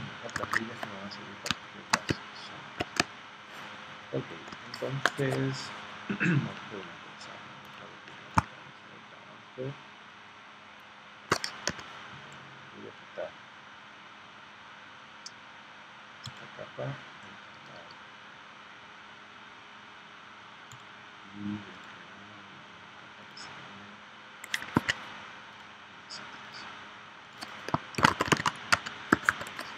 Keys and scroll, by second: 0.5 super+Tab, 1.5 space, 3.0 space, 11.7 v, 27.7-29.1 typing.